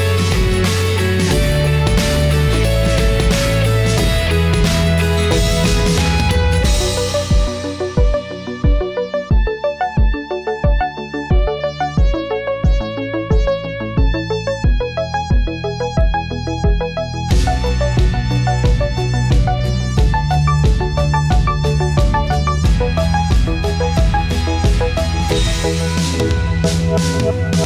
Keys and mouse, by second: 0.9 middle click, 2.3-4.6 drag, 6.1-7.5 drag, 8.1-10.8 drag, 11.3-11.9 drag, 12.4-13.6 drag, 13.9 middle click, 16.3-23.6 middle drag, 25.3 click, 25.8-26.1 drag, 26.5 click, 27.1 click.